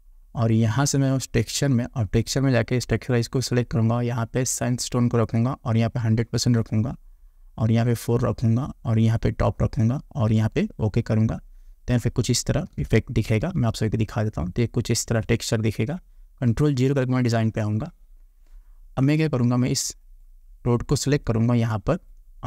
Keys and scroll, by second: 13.3 ctrl+=, 16.9 ctrl+0.